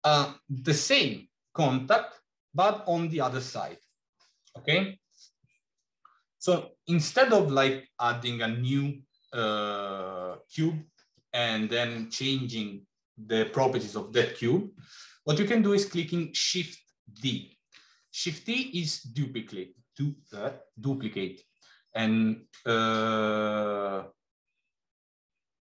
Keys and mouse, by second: 17.3 shift+d.